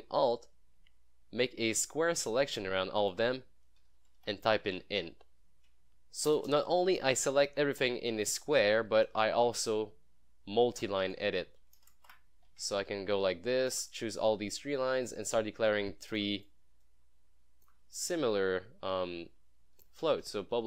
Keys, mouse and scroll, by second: 0.5-3.4 alt+drag, 3.9-4.8 typing, 6.3 BackSpace, 8.0-9.1 typing, 9.7 click, 11.9 Return, 12.1-12.5 scroll up 1, 13.4-14.3 alt+click, 14.6-16.4 alt+drag, 17.2-17.9 alt+click, 18.3 Tab, 19.8-20.6 typing.